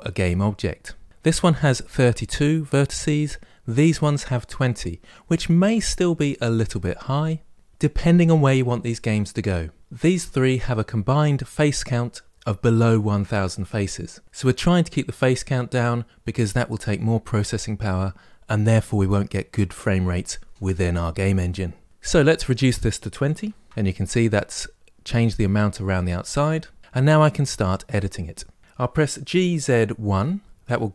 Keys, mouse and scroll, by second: 22.2-24.3 drag, 28.6 middle click, 29.0 g.